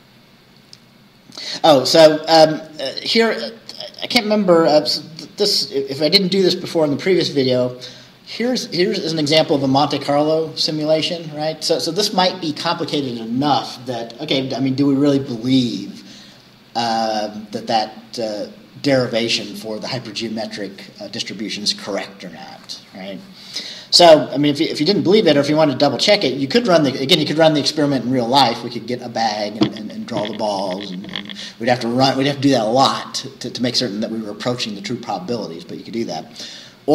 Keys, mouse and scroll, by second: 1.6 scroll up 1, 3.2 click, 3.6-4.0 scroll down 2, 7.7 scroll down 2, 25.5-27.3 scroll up 2, 27.3-28.1 scroll down 4, 28.6-29.0 scroll down 2.